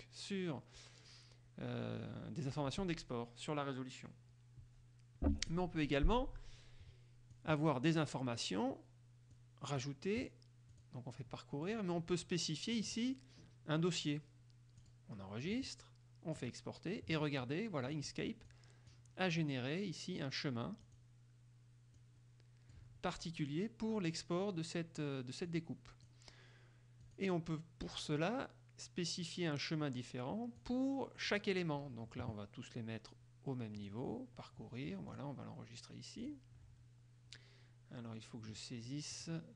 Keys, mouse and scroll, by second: 0.0 click, 7.5 click, 9.5 click, 10.9 click, 12.9 click, 15.0 click, 16.6 click, 18.0 click, 18.6 click, 21.0 click, 22.1 click, 25.6 click, 27.2 click, 30.7 click, 31.4 click, 33.9 click, 35.3 click, 36.4 click, 39.4 click.